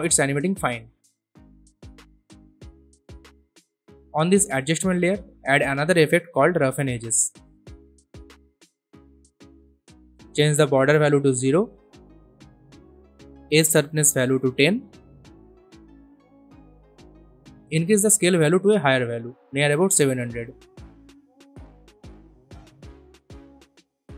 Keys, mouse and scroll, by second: 7.1-8.5 typing, 9.2 click, 11.8 click, 11.9 Return, 13.8-14.5 scroll up 1, 14.5 click, 15.4-16.6 typing, 18.1-23.7 drag.